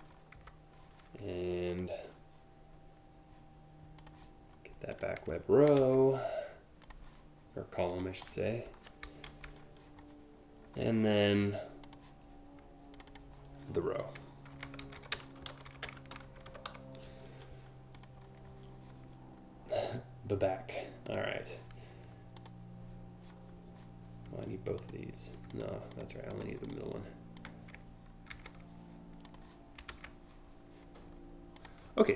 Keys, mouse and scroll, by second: 1.3 click, 3.6 click, 4.6 click, 6.4 click, 7.5 click, 8.4 Delete, 8.9 ctrl+v, 11.5 click, 12.5 click, 12.7 click, 13.9-16.8 typing, 14.9 shift+click, 15.5 shift+click, 17.6 click, 20.7 click, 22.0 click, 24.4 shift+click, 25.1 click, 25.5 click, 25.9 click, 26.3 click, 27.0 click, 27.9 ctrl+c, 28.9 click, 29.5 ctrl+v, 31.2 click.